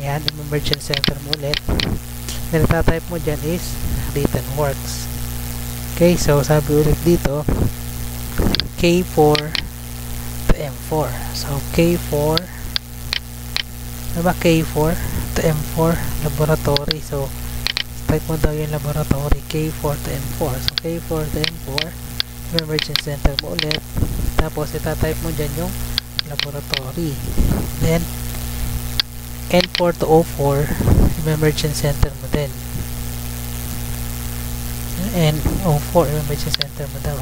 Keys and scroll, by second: 2.5 F2, 2.9 ctrl+v, 4.1 Tab, 5.9 Tab, 11.9 Tab, 14.0 Tab, 18.1 ctrl+c, 19.9 Tab, 24.8 F2, 25.2 ctrl+v, 28.0 Tab, 33.7 Tab, 34.9 Tab.